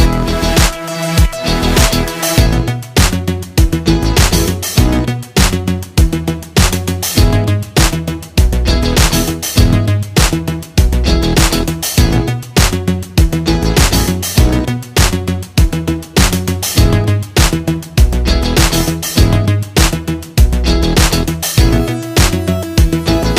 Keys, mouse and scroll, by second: 1.5-19.5 drag, 19.5-22.4 drag.